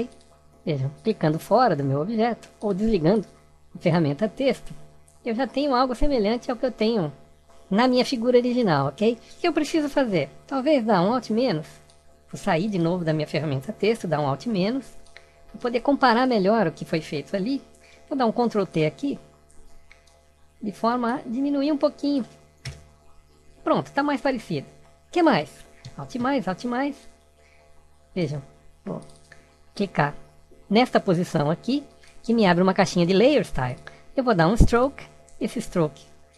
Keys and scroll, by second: 13.2 alt+-, 18.8 ctrl+t, 25.7 alt+=.